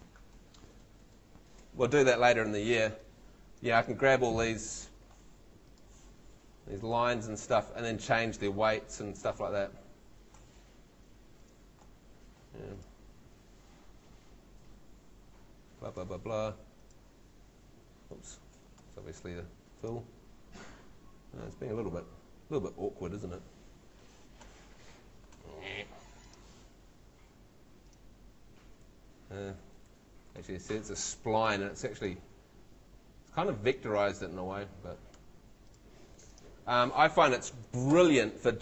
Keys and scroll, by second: 18.3 shift+super+z, 19.2 shift+super+Home, 19.7 shift+Home, 23.8 shift+Home, 29.9 shift+super+=, 37.1 shift+Escape, 37.9 shift+super+Tab.